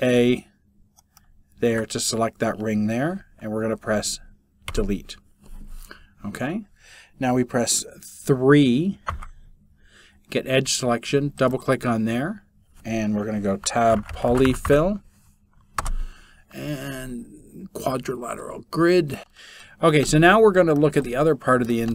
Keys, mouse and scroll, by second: 0.0-1.4 middle drag, 4.3 Delete, 8.2 3.